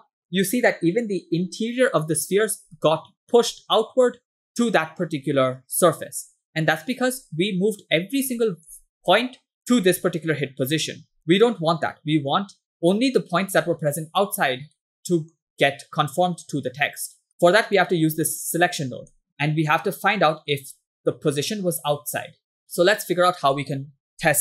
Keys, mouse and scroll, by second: 0.6 scroll down 2, 2.9 middle click, 8.4 shift+middle click, 9.1 click, 9.6 middle click, 11.3 middle click, 14.9 middle click, 17.1 scroll down 2, 17.3 middle click, 17.9-18.6 drag, 19.2 middle click, 19.8 middle click, 23.0 shift+middle click.